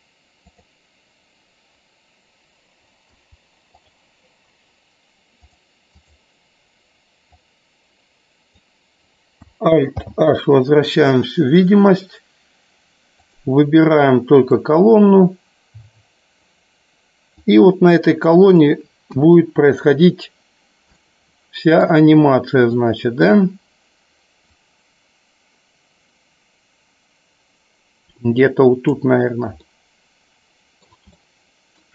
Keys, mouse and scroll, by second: 5.6 click, 7.4-8.5 drag, 10.0 alt+h, 14.7-16.5 drag, 17.4-18.7 drag, 19.1 KP_1, 21.0-21.9 shift+middle drag, 22.9-23.3 shift+middle drag, 24.8-28.9 drag, 29.8-30.8 middle drag, 31.1 shift+middle click.